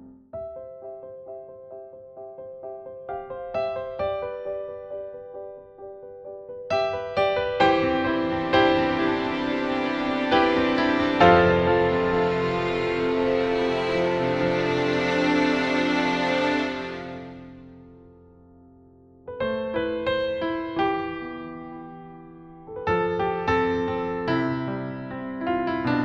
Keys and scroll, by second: 4.7 BackSpace, 8.6-9.4 typing.